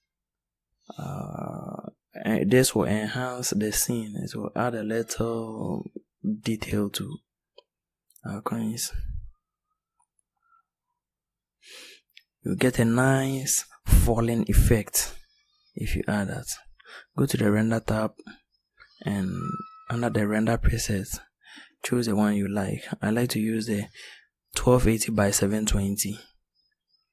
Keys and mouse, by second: 27.0 click.